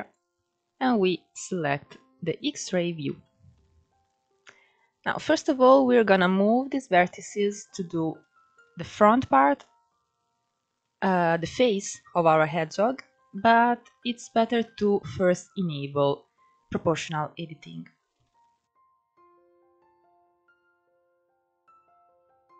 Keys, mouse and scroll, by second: 2.4-2.9 scroll up 1, 2.9 shift+middle click, 3.7 click, 6.2 click, 8.8 ctrl+z, 10.0-10.5 scroll down 2, 10.5-11.2 scroll up 1, 11.2-11.9 scroll up 2, 11.9-14.0 scroll down 1, 14.0 click, 16.7 scroll up 1, 17.4 click, 18.8 click, 19.8 click, 20.6 click, 21.0 click, 21.7 click, 22.4 click.